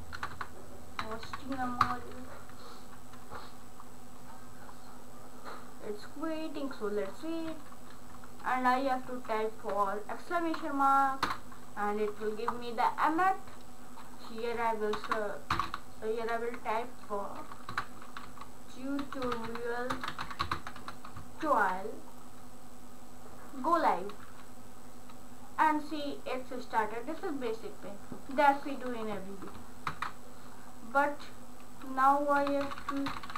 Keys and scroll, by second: 0.0-1.7 typing, 1.9 Return, 9.3 shift+1, 11.3 Return, 15.0-16.2 typing, 17.7-21.3 typing, 21.4 ctrl+s, 32.2-33.3 typing.